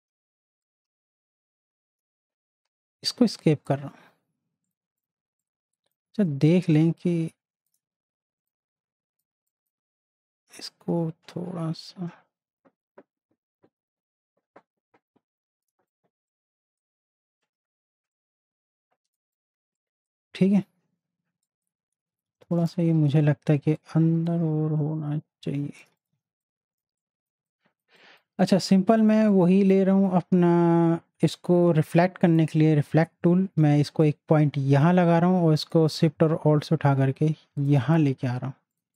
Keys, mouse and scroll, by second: 0.6 alt+click, 2.0 shift+click, 3.3 space, 3.4-8.5 drag, 8.5-19.3 drag, 19.6 space, 19.8 click, 20.1 space, 21.4 click, 24.0-25.9 shift+drag, 26.1 z, 26.7 click, 26.8 space, 27.3 space, 27.7 click, 27.8 space, 31.2 right click, 32.3-38.7 drag, 36.0-37.9 alt+shift+drag.